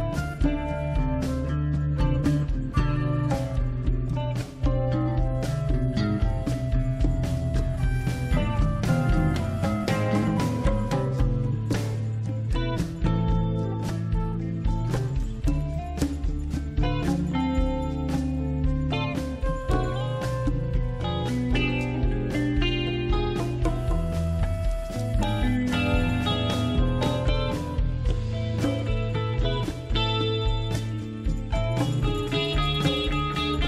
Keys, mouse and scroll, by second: 2.8 click, 4.1 click, 21.4 click, 23.2 click, 24.4 click, 25.9 click, 27.2 click, 28.5 click, 30.4 click, 31.7 click, 33.0 click.